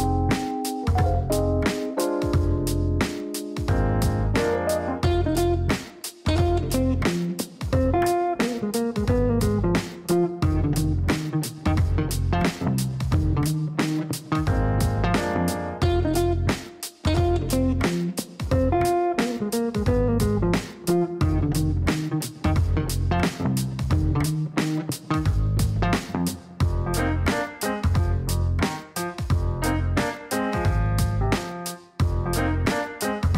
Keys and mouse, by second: 0.9 click, 2.5 click, 3.1 click, 3.9 click, 9.6 click, 13.6 click, 14.6 click, 16.7 KP_Subtract, 17.2-19.9 typing, 19.9 Down, 20.0 Down, 20.2 Down, 20.4 Down, 20.5 Down, 20.7 Down, 20.9 Down, 21.4 Return, 22.7 click, 26.1 click, 27.1 click, 28.4 click, 29.0 click, 30.0 click, 31.7 click, 32.3 click, 32.5 space, 32.7 click, 33.1 space.